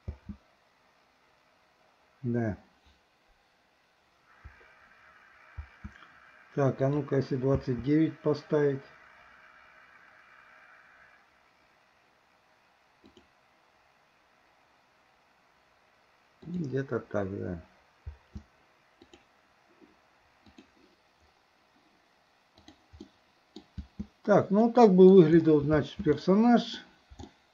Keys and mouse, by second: 0.1 space, 5.6 space, 13.1 click, 16.5 click, 18.1 space, 19.1 click, 20.5 click, 22.6 click, 23.1-23.6 middle drag, 23.9 space, 24.7-25.1 middle drag, 26.2-26.8 middle drag, 26.2 space, 27.3 shift+middle click.